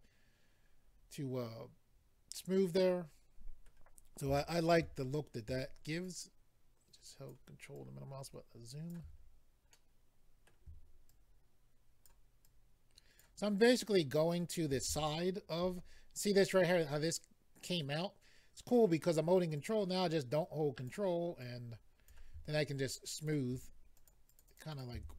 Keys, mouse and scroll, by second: 4.3 shift+middle click, 5.0-6.0 scroll up 3, 6.2 ctrl+click, 6.2 scroll up 1, 7.7 ctrl+click, 9.2-9.7 scroll down 3, 9.7 middle click, 11.1 ctrl+click, 12.4 ctrl+click, 13.6 ctrl+click, 15.0 shift+middle click, 15.7-16.6 scroll up 3, 19.5 click, 21.4 click, 22.6 shift+click, 23.2 click, 23.9 click, 24.1 click, 24.2 click, 24.4 double click, 24.4 click, 24.6 click, 24.7 click, 24.8 double click.